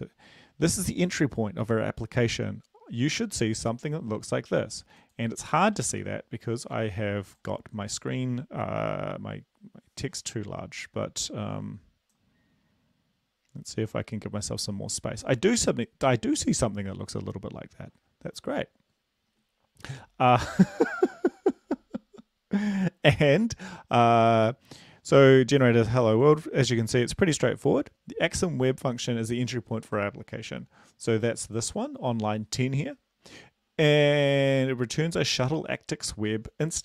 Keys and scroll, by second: 6.5 ctrl+b.